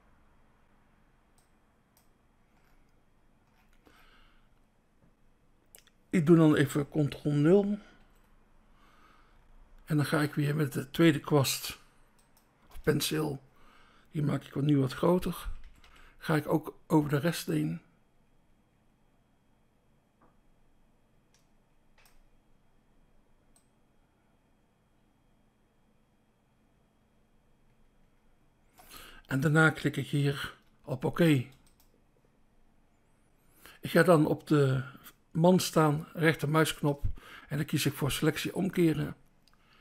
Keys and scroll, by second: 8.0 ctrl+0, 11.7 BackSpace, 12.6 BackSpace, 14.9-15.6 typing, 18.1 typing, 30.9 BackSpace.